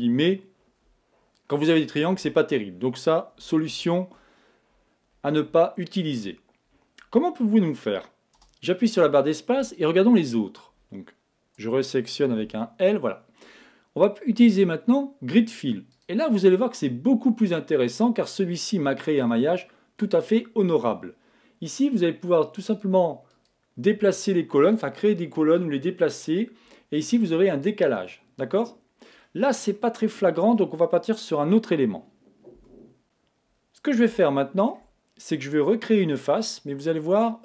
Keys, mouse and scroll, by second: 3.7 super+z, 5.6-7.6 middle drag, 8.4 space, 17.8-19.7 middle drag, 22.8-25.3 drag, 27.6-29.6 drag, 29.8-31.7 middle drag, 32.6 x, 34.2-37.4 middle drag.